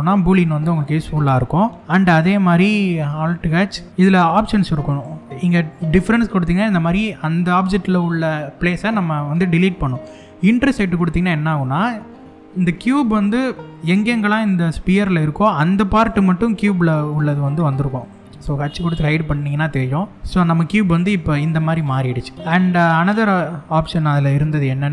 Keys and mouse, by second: 3.3 alt+h, 10.3 click, 11.2-11.9 middle drag, 15.5 click, 16.0 g, 17.7 right click, 18.0 h, 18.7-22.3 middle drag, 22.3 Tab, 24.3 alt+h.